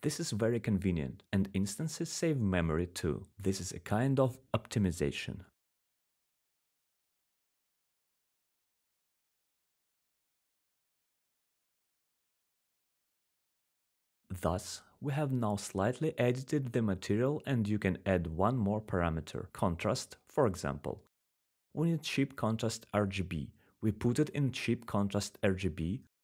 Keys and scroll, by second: 5.5 ctrl+z, 18.6-19.9 typing.